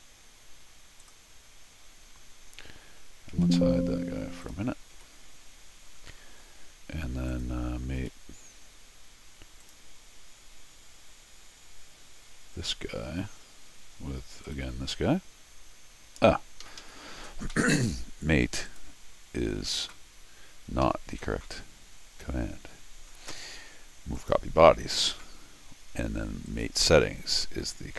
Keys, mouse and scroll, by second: 1.0 click, 3.3 Tab, 4.4 click, 4.9 Tab, 6.1 middle click, 7.3 click, 8.0 m, 9.6 click, 13.2 scroll down 2, 14.4 click, 16.6 Escape, 16.8 Escape, 18.7 click, 20.8 Escape, 24.2 click, 26.5 click.